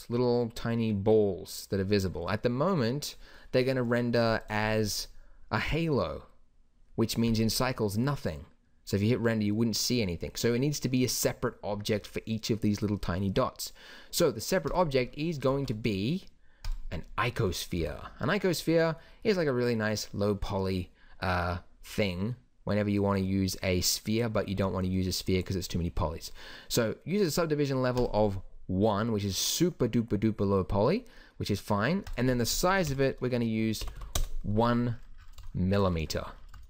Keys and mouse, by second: 14.7-15.5 drag, 15.5 shift+a, 17.8 t, 24.6 z, 28.9-30.0 drag, 30.0-34.0 middle drag, 34.0 m.